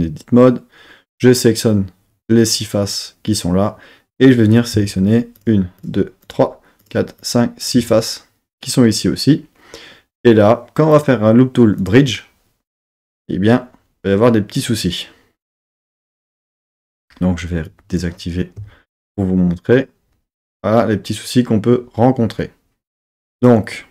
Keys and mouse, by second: 5.3-7.7 shift+drag, 10.9-12.6 right drag, 17.7 click.